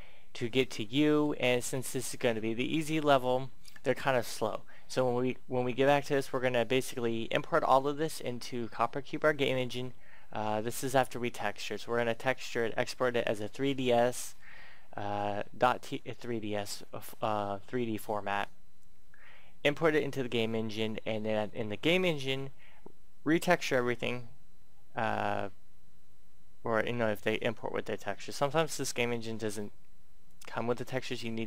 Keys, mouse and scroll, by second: 15.3 middle click, 30.2 click.